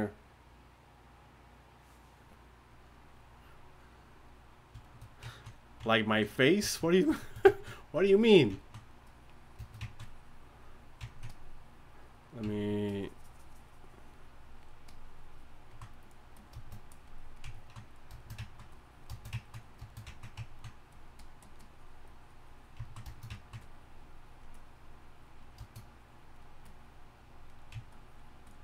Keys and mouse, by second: 6.7-14.7 drag, 14.9-18.2 drag, 19.4-25.4 drag, 25.5-28.6 drag.